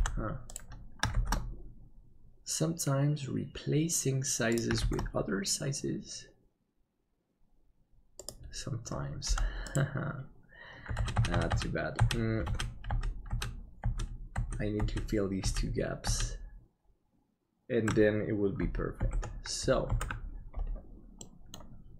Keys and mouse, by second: 0.0 Delete, 1.1 shift+d, 4.8 shift+d, 9.3 Delete, 11.3 ctrl+z, 12.4 ctrl+z, 16.6 ctrl+z, 19.1 alt+a, 20.1 ctrl+s, 21.2 middle click.